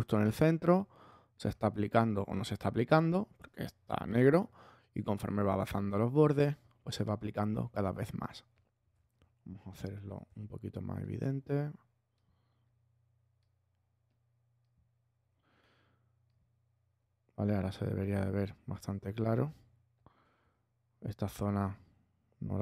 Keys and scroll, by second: 9.7 alt+super+l.